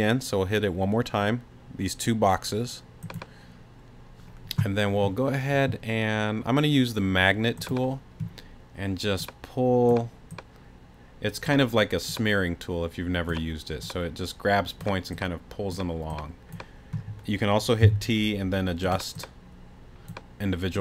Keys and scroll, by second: 17.8 t.